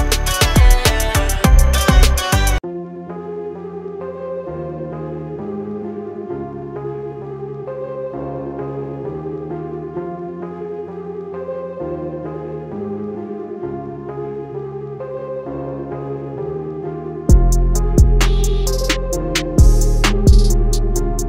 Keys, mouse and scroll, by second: 2.3 scroll down 1, 3.1 ctrl+z, 3.8-5.1 scroll up 1, 5.4 ctrl+a, 6.3 scroll down 1, 7.8 click, 9.9 scroll down 1, 10.3 scroll up 1, 11.0 alt+scroll up 1, 11.9 scroll down 1, 14.2 scroll down 1, 16.2 scroll down 1, 17.8 click, 18.6 scroll up 1, 19.7 click.